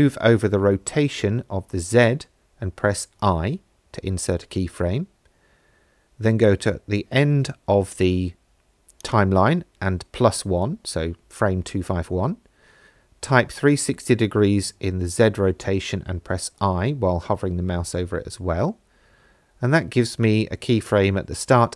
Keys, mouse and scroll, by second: 2.9 shift+Right, 5.8 Right, 9.0-11.2 drag, 15.8 space.